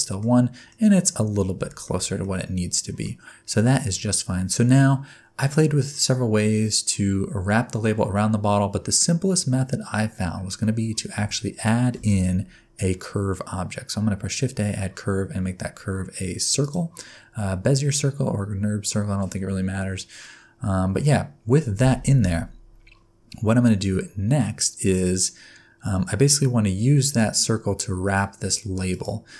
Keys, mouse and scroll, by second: 0.3 scroll up 2, 0.7 middle click, 1.1-1.5 scroll up 6, 1.7 shift+middle click, 2.2 middle click, 11.9 shift+a, 28.9 click.